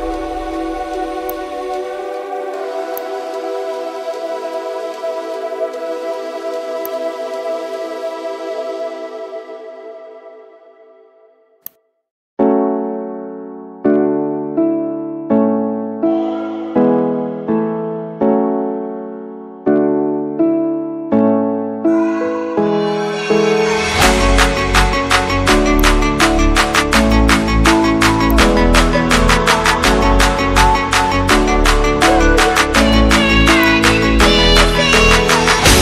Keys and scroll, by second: 19.7 ctrl+j, 22.0 ctrl+t, 32.3 ctrl+t.